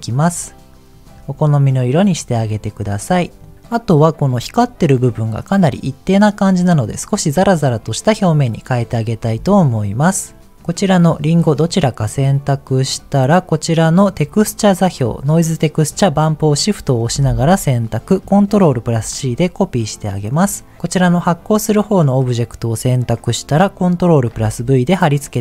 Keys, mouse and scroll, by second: 3.4 click, 3.5 scroll up 2, 8.4-9.9 scroll down 4, 10.6 click, 11.2 click, 11.6 click, 12.0 click, 12.8 click, 14.0 click, 15.0 shift+click, 15.7 shift+click, 18.8 ctrl+c, 20.3 click, 24.3 ctrl+v.